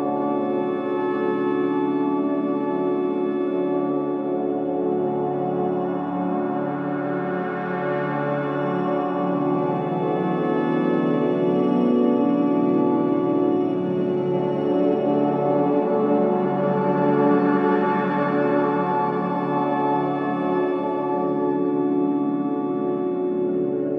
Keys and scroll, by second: 10.7 ctrl+z.